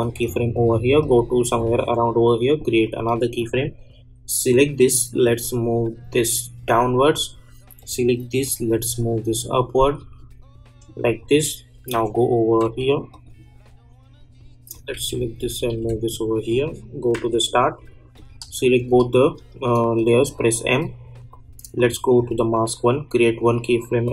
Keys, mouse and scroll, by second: 11.9 j, 12.6 k, 13.1 click, 14.9 Down, 16.3 click, 17.1 j, 18.1 click, 18.7 shift+click, 20.2 m, 21.3 click.